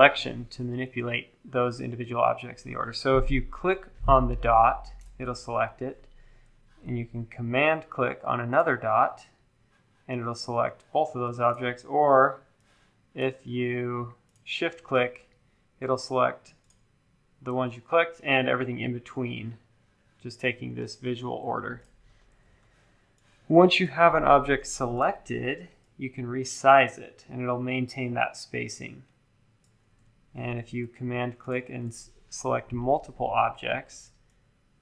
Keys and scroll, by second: 30.0 super+z.